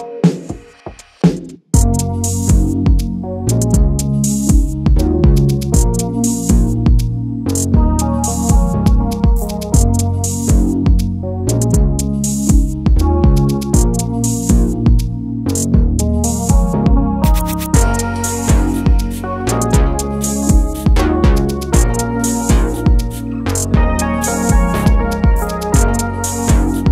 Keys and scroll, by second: 6.2 alt+shift+super+e, 13.3 super+g.